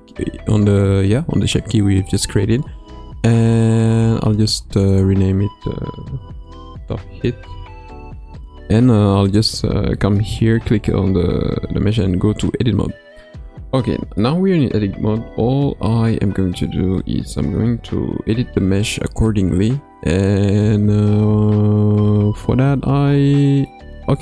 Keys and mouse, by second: 4.8-7.8 drag, 11.6 Tab.